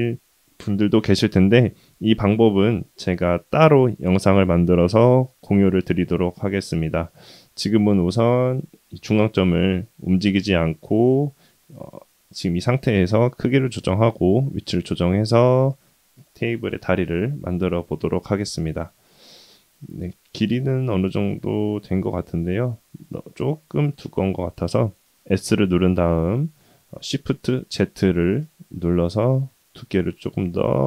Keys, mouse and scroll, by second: 1.0-1.5 scroll down 1, 3.1-3.8 scroll down 2, 4.0-4.4 shift+middle drag, 4.5 shift+middle drag, 8.7 shift+middle drag, 14.9-15.5 middle drag, 16.1-17.0 middle drag, 17.5-18.8 middle drag, 19.0 KP_1, 19.4-23.0 middle drag, 23.2-23.9 scroll up 2, 24.5 s.